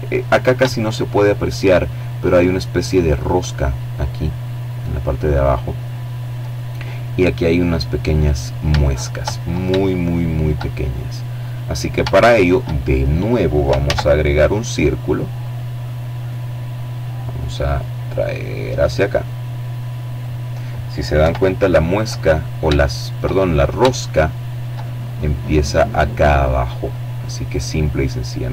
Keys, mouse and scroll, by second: 7.8-8.9 middle drag, 10.1 shift+middle click, 10.7 shift+middle click, 11.8 shift+a, 13.3 click, 14.0-14.9 scroll down 2, 15.7-18.6 drag, 19.1 KP_7, 20.0-20.7 scroll up 3, 20.8 shift+middle click, 21.3-21.8 shift+scroll up 1, 21.8 shift+middle click, 24.3-25.1 scroll down 1, 25.3-26.9 middle drag, 26.9-27.5 scroll up 1, 27.5 shift+middle click.